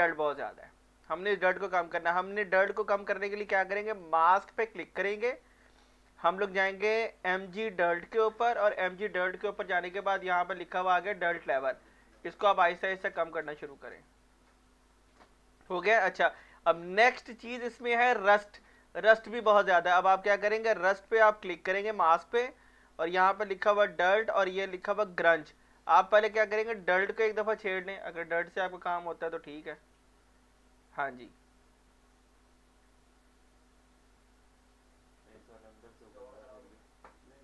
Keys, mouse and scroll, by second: 4.0 click, 7.2 click, 11.8-17.5 drag, 17.5 alt+right click, 18.7-21.3 alt+right drag, 21.4-23.6 drag.